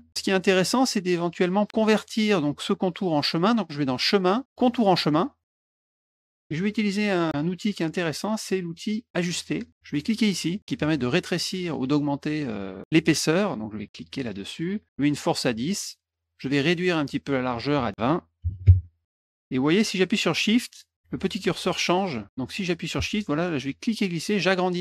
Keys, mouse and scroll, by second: 3.9 click, 5.0 click, 5.4 click, 14.3 click, 17.5 click, 23.8 shift+click.